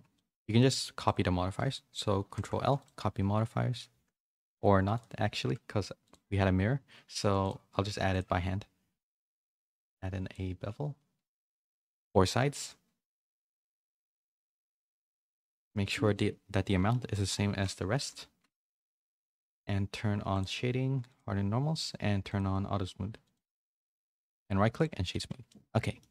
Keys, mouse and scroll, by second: 0.1 middle click, 0.5 middle click, 1.0 shift+click, 2.1 ctrl+l, 4.3 ctrl+z, 6.0 click, 7.5 click, 9.7 click, 11.3 click, 11.5 click, 13.0-14.1 shift+drag, 15.1-19.1 drag, 17.8 0, 20.3 click, 21.0 click, 22.3 click, 23.2 click, 24.3 right click, 25.1 a, 25.3 a, 25.4 middle click.